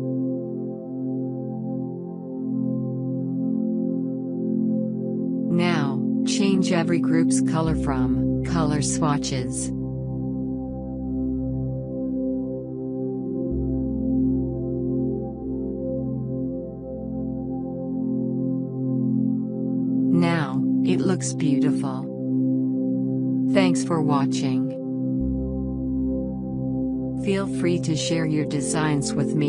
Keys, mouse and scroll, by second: 3.0 right click, 3.5 click, 5.6 click, 7.2 click, 13.3 click, 14.9 click.